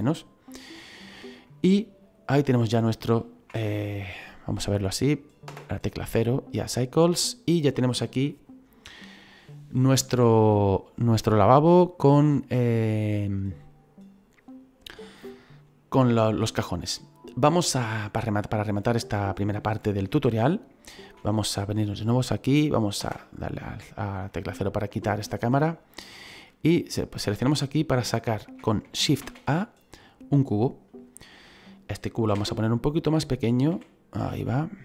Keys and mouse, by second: 20.0 shift+middle click, 22.3 click, 22.9 KP_0, 24.2 middle click, 25.1 shift+middle click, 26.0 shift+middle click, 26.8 click, 29.1 shift+a, 30.6 click, 32.3 s, 33.1 click, 33.6 s, 34.1 click.